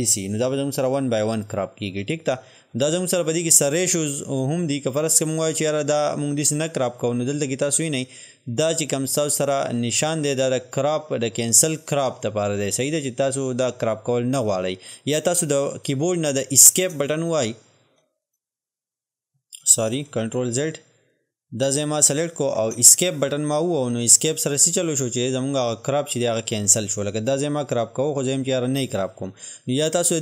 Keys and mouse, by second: 18.2 click, 20.3 ctrl+z, 21.1-27.0 drag, 27.0-30.2 drag.